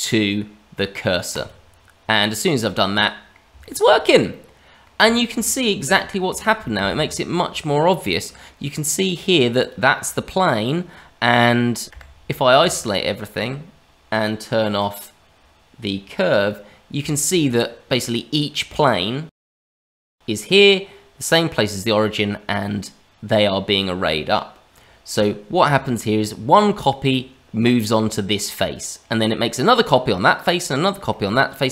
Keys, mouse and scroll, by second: 2.5 middle click, 3.6 shift+middle click, 3.9-4.2 scroll up 1, 4.2 middle click, 5.1 middle click, 5.4 middle click, 5.9 shift+middle click, 6.6 shift+middle click, 6.9-7.4 scroll up 3, 7.3 middle click, 9.5 click, 11.6 scroll down 2, 11.8 click, 11.9 KP_Divide, 12.8 shift+middle click, 15.3-15.8 scroll down 2, 16.3 click, 17.1 shift+middle click, 19.3 click, 19.8 middle click, 29.0-31.0 scroll up 2, 31.0 middle click.